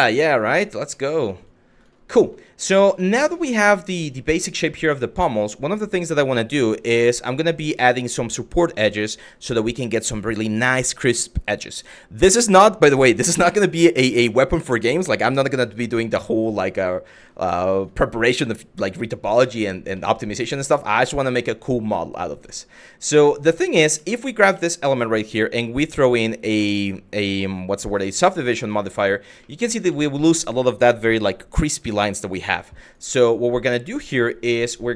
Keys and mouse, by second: 0.5 middle drag, 1.0 shift+middle click, 1.4 click, 1.9 middle drag, 2.6 shift+middle drag, 3.6 click, 4.6 shift+middle drag, 5.6 click, 19.7-20.0 middle drag, 22.7 Tab, 23.2 middle click, 23.8 middle click, 24.2 Tab, 25.1 click, 25.7-27.7 drag, 28.4 shift+middle drag, 29.2-29.5 middle drag, 29.7 shift+middle click, 31.6 middle drag, 32.5 click, 32.7 Tab.